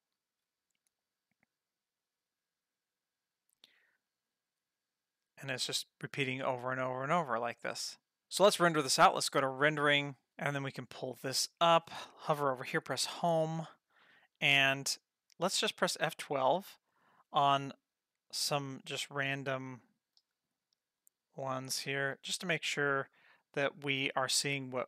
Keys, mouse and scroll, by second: 9.2 click, 10.9 click, 13.0 Home, 15.7 F12, 17.2 click, 18.5 F12, 19.7 click, 20.3 F12, 21.8 click, 22.2 F12, 23.7 click, 24.2 F12.